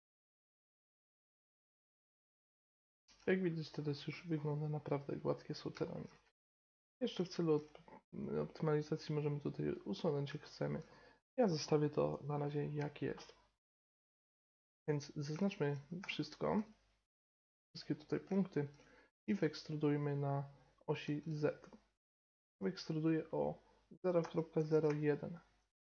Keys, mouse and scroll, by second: 0.0-1.9 typing, 0.1 right click, 0.6 ctrl+z, 0.9 right click, 1.4 right click, 1.7 right click, 1.9 click, 2.1-5.3 middle drag, 3.0 Tab, 5.8-9.1 middle drag, 6.2 Tab, 9.1-10.4 right drag, 10.4 middle click, 11.3 right click, 11.6-15.2 middle drag, 15.9 a, 16.5 a, 19.2 e.